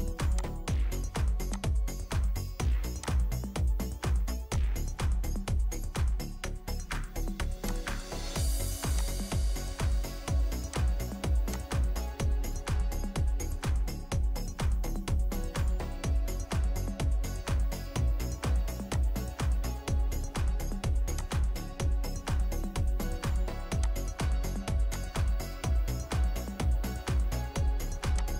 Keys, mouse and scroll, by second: 5.9 Escape, 6.7 Escape, 13.9 Escape, 14.3 typing, 15.7 Return, 26.7-27.0 typing, 27.0 Return.